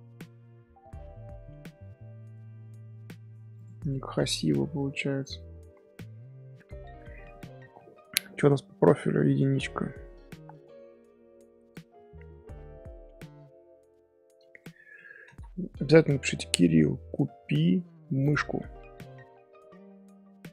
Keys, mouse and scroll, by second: 3.9 shift+middle click, 4.3 scroll up 1, 4.8 scroll down 1, 4.8 scroll up 1, 5.1 Tab, 6.1 scroll down 2, 10.4-10.9 scroll up 1, 10.9 scroll down 1, 11.5 scroll up 2, 12.3 scroll down 1, 12.8 Tab, 13.2 scroll up 1, 14.0 scroll down 2, 14.6-15.1 ctrl+middle drag, 15.1 s.